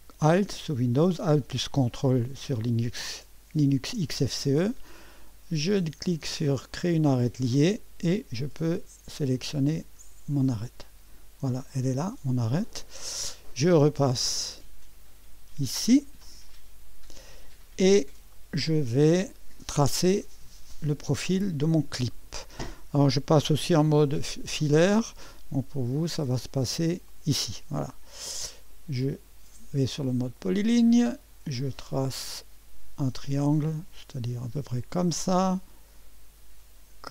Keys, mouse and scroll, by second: 2.2-3.7 drag, 6.7 click, 10.6 click, 16.5 click, 17.9-18.8 scroll up 1, 18.3 right click, 21.4 scroll up 1, 22.1 right click, 25.9 click, 27.1 click, 27.9-28.4 scroll up 1, 28.4 middle click, 30.4 click, 32.1 click, 34.8 click.